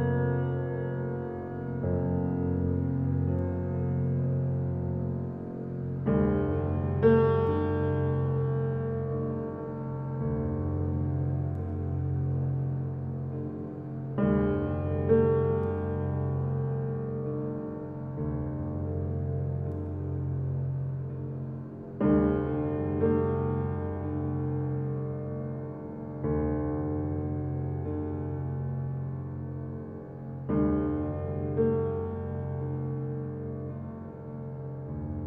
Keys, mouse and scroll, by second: 15.7 click, 16.2-17.2 scroll down 1, 17.2 click, 17.7-18.2 scroll up 1, 19.1 click, 22.3-22.7 typing, 24.2 right click, 28.0 click, 32.0 click, 32.6-33.3 scroll up 1, 33.3 click.